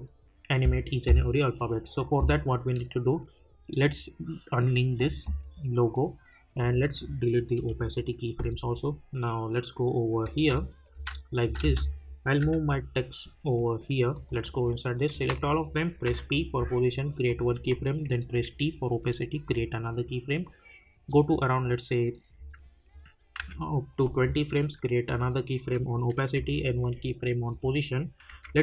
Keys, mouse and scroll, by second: 4.4 click, 10.3 space, 14.1 click, 15.3 ctrl+a, 16.0 p, 17.2 click, 18.3 t, 19.4 click, 23.4 =, 25.0 click, 26.3 p, 27.5 click, 28.3 j.